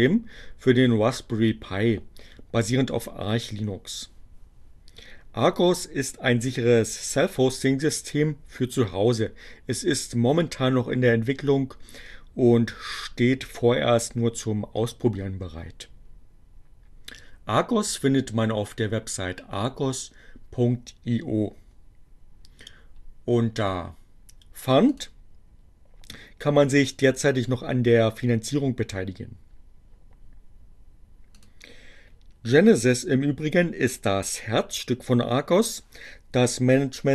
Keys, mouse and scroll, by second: 24.2-25.3 drag, 31.5 click.